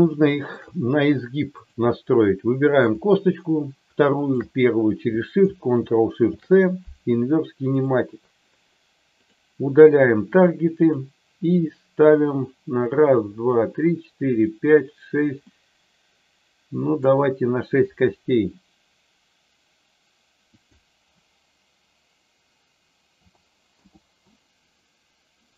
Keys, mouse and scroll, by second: 0.1 shift+middle click, 1.5 click, 4.1 shift+click, 7.9 ctrl+shift+c, 9.1 ctrl+shift+click, 10.2 click, 10.8 click, 15.5-17.0 middle drag, 20.5-24.1 drag.